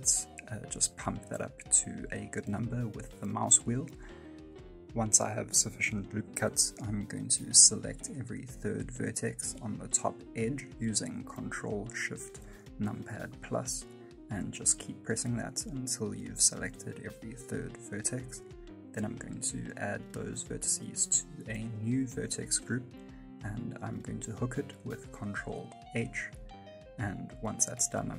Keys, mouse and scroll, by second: 6.9 shift+scroll up 1, 7.0 shift+middle click, 7.4 middle click, 7.7-8.7 scroll up 3, 8.1 1, 8.7 right click, 9.1 middle click, 11.1 shift+right click, 11.5 middle click, 12.4-12.8 ctrl+shift+KP_Add, 12.9 ctrl+shift+KP_Add, 13.0-15.0 ctrl+shift+KP_Add, 15.2 ctrl+shift+KP_Add, 15.3 ctrl+shift+KP_Add, 15.7 scroll down 1, 16.1 middle click, 16.9 ctrl+shift+KP_Add, 17.4 ctrl+shift+KP_Add, 18.5 middle click, 19.0 scroll down 1, 19.2 middle click, 23.5 click, 23.5 scroll down 2, 23.7 shift+middle click, 24.0-24.3 scroll up 1, 24.3 middle click, 25.0 ctrl+h, 26.0 middle click, 27.8 right click.